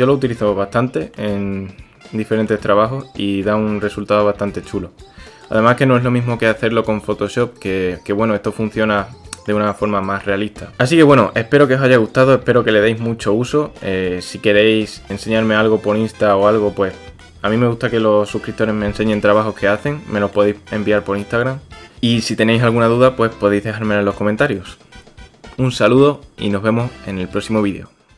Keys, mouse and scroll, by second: 0.1-1.3 drag, 2.5-3.5 drag, 4.1-5.4 drag, 8.8-9.5 middle drag, 11.6-12.2 middle drag, 13.9 shift+drag, 14.1-14.7 shift+middle drag, 15.1-16.3 middle drag, 16.5-17.1 drag, 17.3 shift+middle click, 19.9 middle click, 20.6 shift+middle click, 21.0-21.4 middle drag, 22.9-23.6 middle drag, 24.1 shift+middle drag.